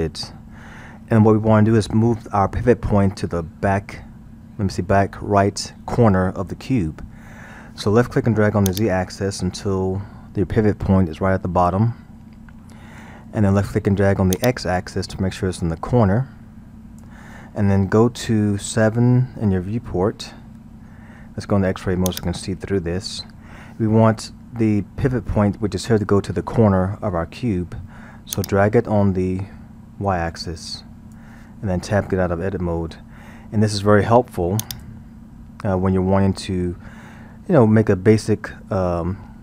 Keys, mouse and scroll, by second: 8.7-11.8 drag, 14.4-17.4 drag, 19.1 KP_7, 22.1-25.1 drag, 28.4-31.4 drag, 32.8 Tab, 34.7-37.5 drag, 37.5-39.4 scroll.